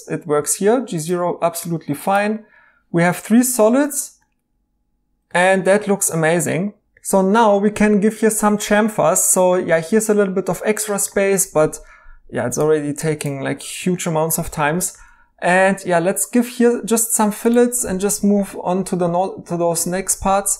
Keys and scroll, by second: 3.7 alt+h.